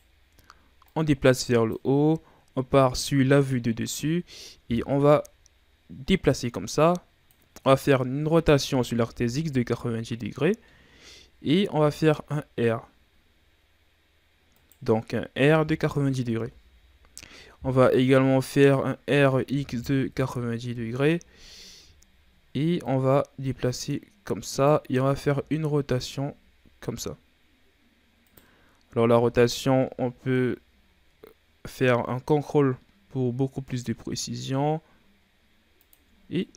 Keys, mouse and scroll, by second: 0.8-2.9 drag, 2.9 KP_7, 4.2-6.0 shift+scroll up 2, 6.0-8.2 drag, 8.2 r, 11.6 r, 15.3 r, 19.0 r, 22.7-25.1 drag, 25.1 r, 29.1 r, 36.2 scroll down 1, 36.3-36.5 middle drag.